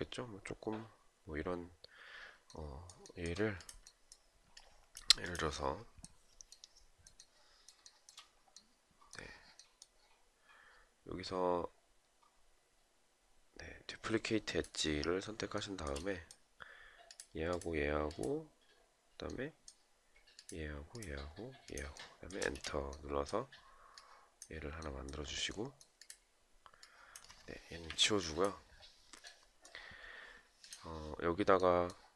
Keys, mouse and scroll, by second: 2.5 shift+right click, 4.1 alt+click, 7.3 shift+right click, 15.1 shift+right click, 21.9 space, 27.4 Delete.